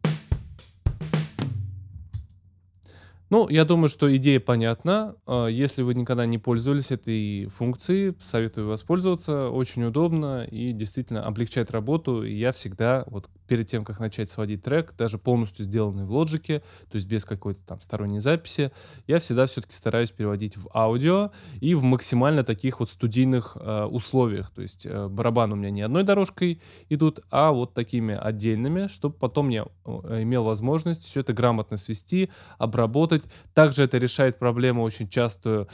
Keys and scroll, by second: 1.9 space.